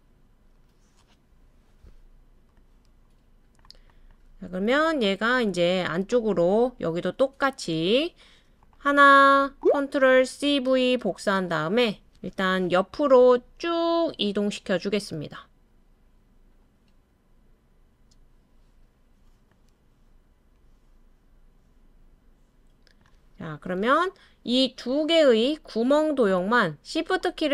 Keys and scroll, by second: 10.7 super+c, 11.0 super+v, 12.9 Left, 14.3-15.0 typing.